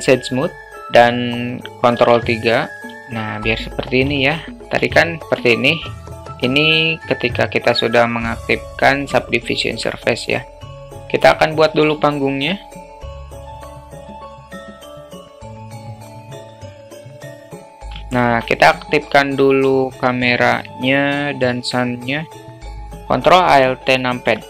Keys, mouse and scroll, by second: 2.0 ctrl+3, 3.0-3.8 alt+middle drag, 4.3 alt+middle click, 4.8 ctrl+z, 5.5 alt+middle click, 10.6-11.1 drag, 11.2 click, 11.7 shift+a, 12.8 s, 13.6 alt+middle click, 13.8 Tab, 13.9 2, 14.3 alt+middle click, 14.5 3, 14.9 click, 15.0 2, 15.1 click, 15.5 e, 16.3 ctrl+b, 16.8 Tab, 17.2 `, 18.1 alt+shift+middle click, 20.2 click, 22.4 click.